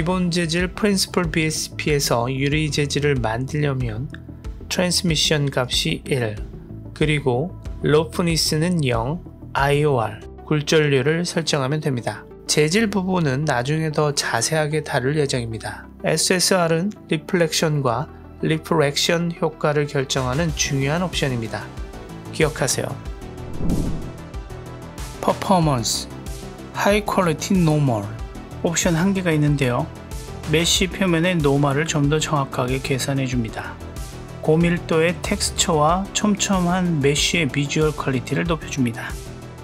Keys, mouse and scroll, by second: 0.9 g, 3.3 right click, 4.4 click, 5.3-5.9 drag, 6.2 click, 6.7 right click, 7.0-16.6 scroll up 1, 16.6 click, 19.3 click, 20.0 click, 26.2 drag, 26.7-27.5 scroll down 1, 28.4 click, 33.2 click, 33.7 click, 39.5 drag.